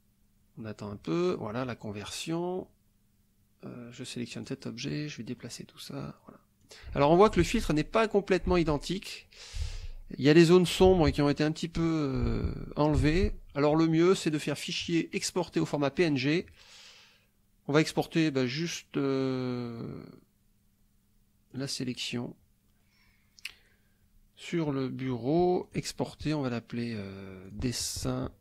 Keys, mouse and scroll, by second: 4.3 click, 5.4-6.8 drag, 7.5 alt+Tab, 8.6 alt+Tab, 9.7 alt+Tab, 11.0 alt+Tab, 13.1 alt+Tab, 14.3 click, 15.2 click, 21.5 click, 25.7 click, 27.5 click.